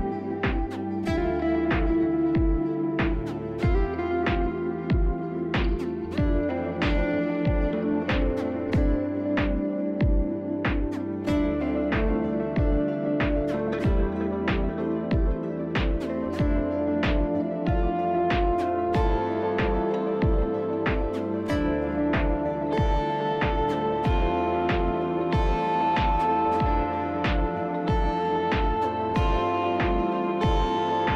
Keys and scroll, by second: 5.9-6.7 typing, 14.2 ctrl+z, 17.2 F4, 26.0 f, 26.7 shift+s, 27.0 shift+s, 27.4 shift+s, 29.6 shift+s, 30.4 shift+s, 30.7 shift+s.